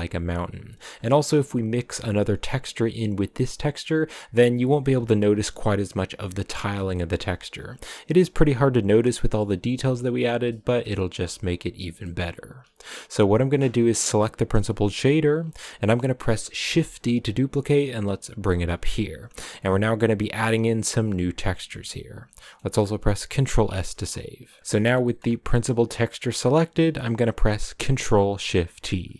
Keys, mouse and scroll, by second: 4.8-6.7 scroll up 2, 6.8 shift+middle click, 7.2-8.6 scroll up 2, 9.9 shift+middle click, 10.4-10.9 scroll down 1, 10.9-13.6 shift+middle drag, 13.6-14.2 scroll up 5, 14.2 click, 16.5 shift+d, 20.1 click, 25.5 click.